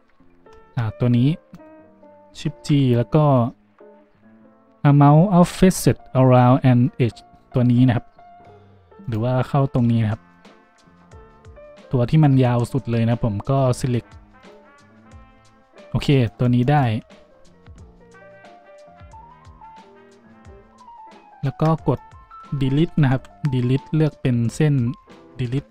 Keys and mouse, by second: 1.5 middle click, 2.5 shift+g, 14.9 z, 23.1 Delete, 25.6 shift+click.